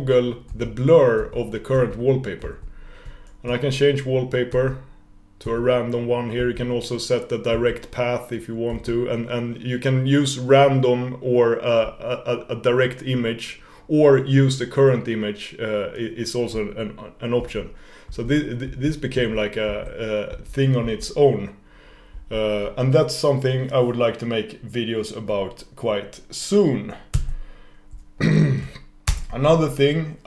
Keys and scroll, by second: 4.7 shift+super+w, 9.2 shift+super+w, 17.5 ctrl+super+w, 27.3 super+s.